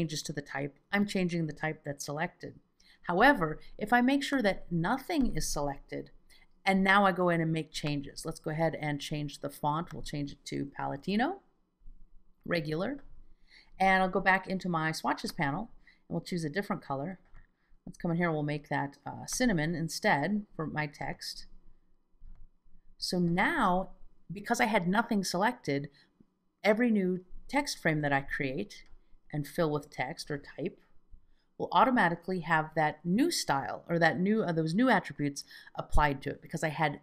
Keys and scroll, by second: 31.1 F2, 31.7 F2.